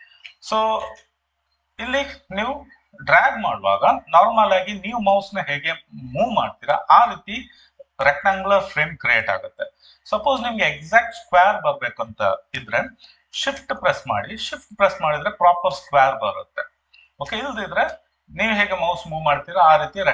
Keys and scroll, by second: 0.8 ctrl+d.